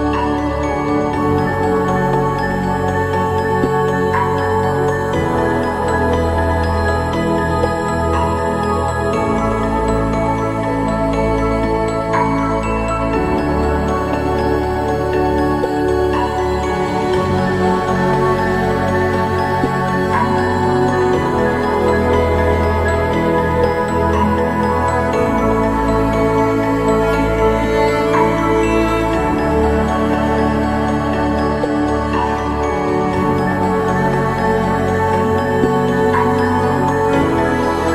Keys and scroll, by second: 33.6 ctrl+-.